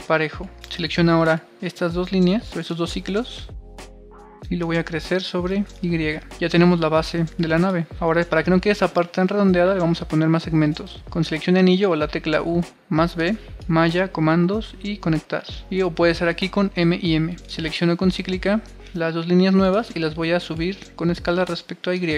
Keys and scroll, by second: 2.8-3.4 typing, 7.3 super+r, 21.8 super+r.